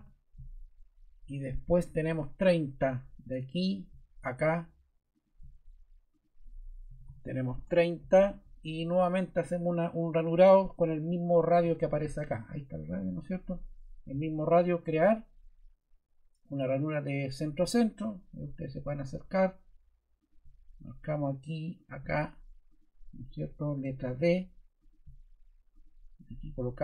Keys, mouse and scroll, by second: 6.6-7.5 typing, 13.2 click, 14.8 click, 23.4 ↺, 23.8 d.